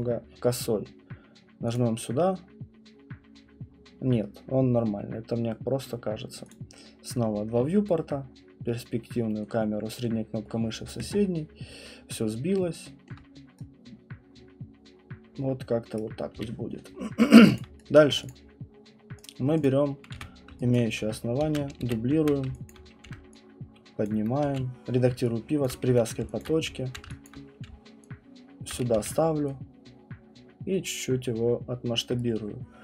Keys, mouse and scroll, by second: 1.7 click, 6.5 click, 10.0 middle click, 13.1 alt+middle click, 15.9 right click, 16.3 q, 16.9 middle click, 17.2 middle click, 17.5 alt+click, 18.1 right click, 18.3 click, 19.2 click, 19.6 click, 20.1 w, 20.7 alt+click, 21.5 ctrl+d, 22.2 typing, 22.7 alt+click, 24.1 click, 24.2-28.9 typing, 25.6 click, 28.7 click, 32.0 click.